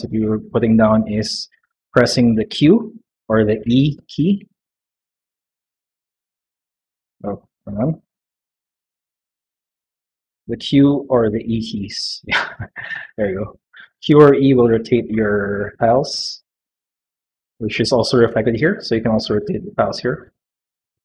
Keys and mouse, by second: 2.3 q, 3.5 r, 5.9 r, 10.3 q, 11.3 e, 11.6 e, 12.8 click, 13.4 click, 13.9-16.0 typing, 19.4 click, 19.8 click, 20.0 click, 20.8 click.